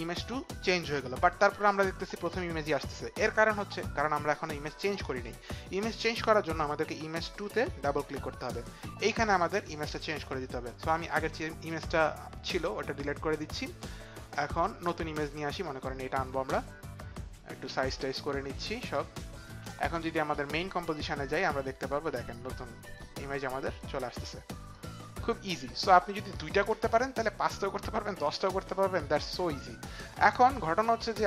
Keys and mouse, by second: 7.4 click, 7.6 click, 12.8 Delete, 13.6 click, 15.1 click, 17.9 shift+click, 22.2 click, 22.8 click, 23.8 click, 25.0 click.